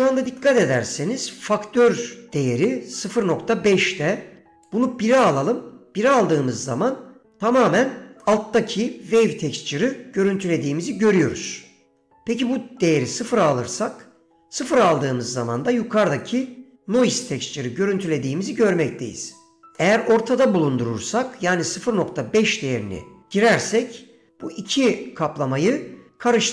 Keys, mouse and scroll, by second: 0.5 middle click, 1.5-3.2 scroll down 2, 4.6 click, 8.4 middle click, 11.3 middle click, 12.4-13.3 drag, 15.7 middle click, 19.9 middle click.